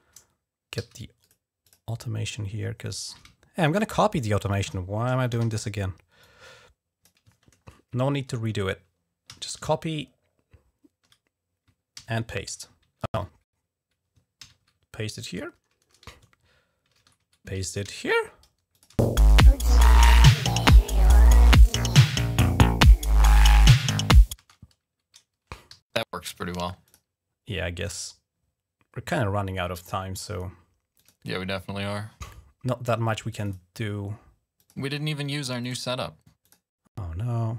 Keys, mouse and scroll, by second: 0.6 d, 1.0 click, 1.4 click, 3.1-4.0 ctrl+scroll down 4, 4.2-4.5 ctrl+scroll up 1, 5.2 r, 6.0 click, 7.0 click, 7.2-7.8 ctrl+scroll down 2, 7.9-8.2 ctrl+scroll up 2, 8.2-8.6 ctrl+scroll down 2, 9.1 ctrl+c, 10.0 scroll up 1, 11.8 ctrl+v, 12.9 ctrl+z, 14.2 ctrl+v, 16.7 ctrl+z, 17.6 ctrl+v, 18.0-19.2 typing, 18.5 click, 23.5 g, 24.2 space, 25.5 typing, 26.6 click, 27.8 right click, 28.1-28.8 typing, 30.8 click, 32.0 click, 33.1 click, 33.7 click, 34.4 click, 35.5 click, 36.3 click.